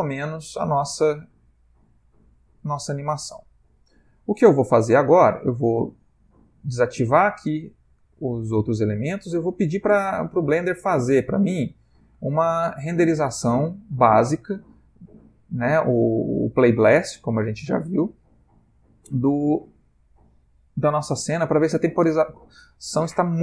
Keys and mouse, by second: 3.7 Escape, 6.4 click, 7.3 click, 7.9 click, 10.3 click, 15.3 click, 18.9 click, 19.9 ctrl+click.